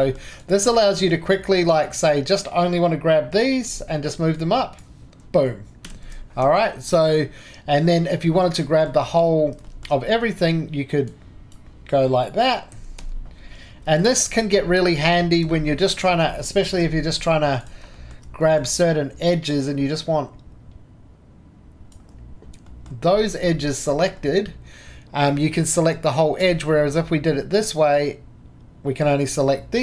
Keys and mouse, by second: 0.0-3.7 drag, 3.7 g, 4.3-5.9 drag, 5.9 ctrl+z, 6.4 Escape, 6.9-9.6 drag, 9.7 shift+middle drag, 10.1-11.1 shift+middle drag, 11.1 right click, 11.1-12.7 middle drag, 12.7 g, 13.8 Escape, 15.1 shift+middle click, 16.8 2, 22.7-25.6 drag, 25.6 click, 25.9-26.4 drag, 26.4-26.7 right drag, 26.7-27.5 drag, 28.6-29.4 drag, 29.5-29.8 drag.